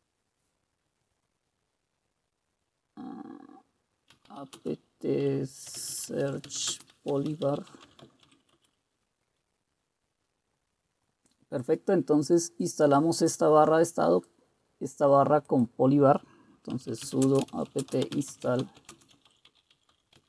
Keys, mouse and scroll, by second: 3.9-8.8 typing, 16.7-20.2 typing.